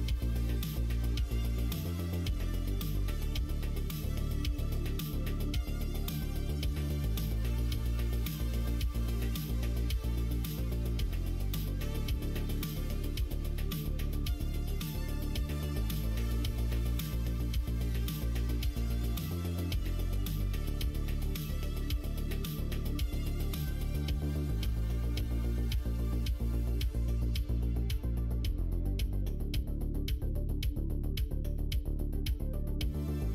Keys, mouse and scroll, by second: 0.2 middle click, 1.5 click, 2.2 middle click, 3.5 middle click, 5.1 shift+click, 5.6-7.3 middle drag, 8.1 alt+z, 9.0 2, 9.3 click, 9.9 shift+click, 11.8 click, 13.1 shift+click, 14.5 shift+click, 15.4 shift+click, 16.4 click, 17.4 alt+z, 18.3 middle click, 18.3 scroll up 1, 19.1 click, 19.3 middle click, 20.0 middle click, 20.4 middle click, 21.4 3, 21.6 click, 22.1 middle click, 23.3 shift+click, 23.6 middle click, 25.0 alt+e, 28.1 3, 28.5 click, 29.3 2, 29.6 click, 30.2 shift+click, 30.4 middle click, 31.8 shift+click, 32.6 middle click.